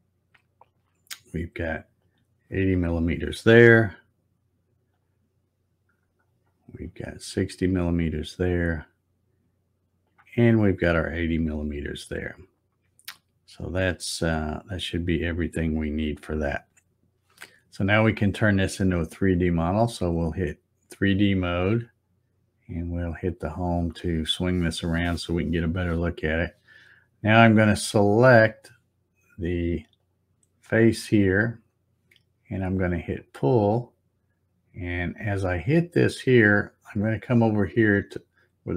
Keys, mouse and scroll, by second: 0.6 click, 2.0 click, 4.9 click, 6.8 click, 8.7 click, 10.0 click, 19.9 click, 22.7 click, 28.5 click, 30.0 click, 33.1 click, 35.5 click.